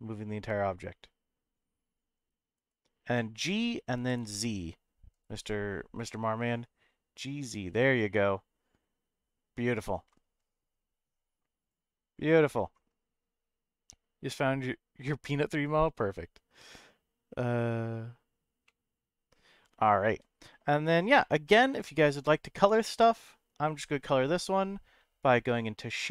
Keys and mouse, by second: 2.5 right click, 3.1 middle click, 4.0 g, 4.2 z, 5.1 right click, 18.6 middle click, 21.2 shift+middle click, 22.6 Tab, 23.1 click.